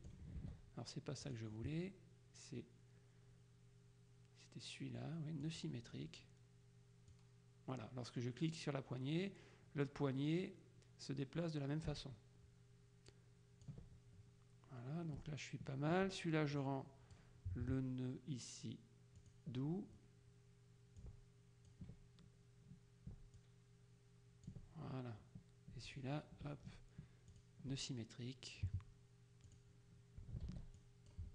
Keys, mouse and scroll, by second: 0.5 ctrl+z, 1.3 click, 5.5 click, 7.2-14.2 drag, 16.7 click, 19.3 click, 21.1 ctrl+click, 23.5-25.1 ctrl+drag, 26.0 ctrl+click, 27.4 click, 29.6 click, 30.6 ctrl+z, 30.9 ctrl+click.